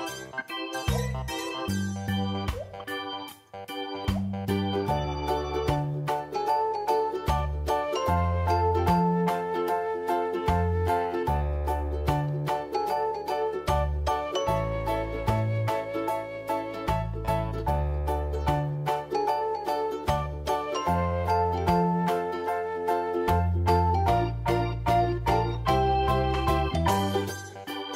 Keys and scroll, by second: 0.5 v, 1.1 ctrl+t, 4.9 alt+v, 5.9 t, 5.9 Delete, 7.2 Return, 7.7 v, 11.2 shift+F7.